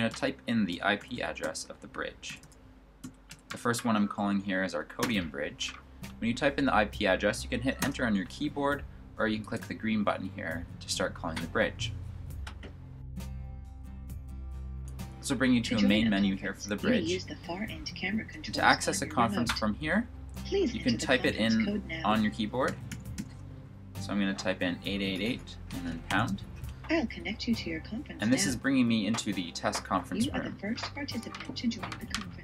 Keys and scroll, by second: 0.0-3.8 typing, 22.5-23.0 typing, 26.0 typing.